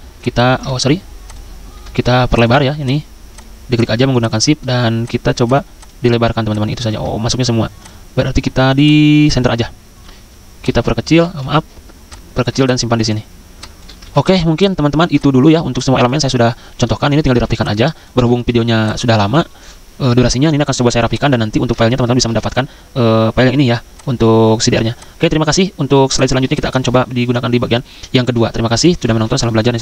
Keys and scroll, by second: 0.7 ctrl+z, 6.9 ctrl+z, 11.4 ctrl+z, 14.0 ctrl+z, 17.3 z, 22.3 ctrl+s, 24.7 z.